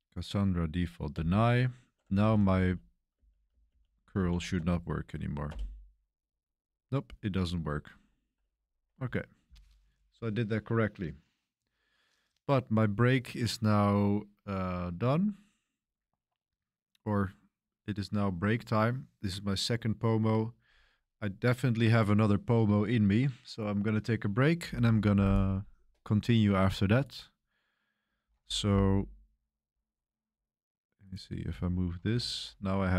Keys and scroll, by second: 1.1 Return, 2.2 ctrl+r, 3.1 Page_Up, 3.4 Page_Up, 3.6 Page_Up, 4.1 Page_Up, 4.5 Return, 5.4 Return, 32.0 ctrl+alt+shift+1.